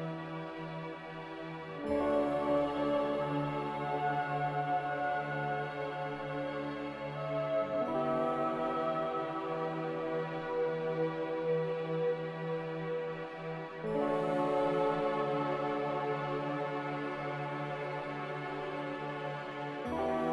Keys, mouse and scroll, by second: 1.9 x, 4.4-5.4 typing, 7.6-10.0 typing, 8.7 Return, 15.1 z.